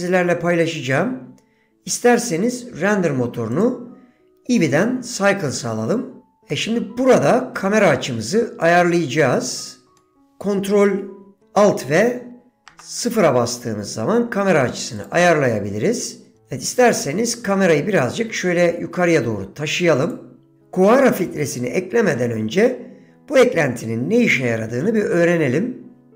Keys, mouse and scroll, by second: 3.6-6.4 drag, 6.6-7.8 middle drag, 8.7-10.2 middle drag, 15.1 click, 16.8 g.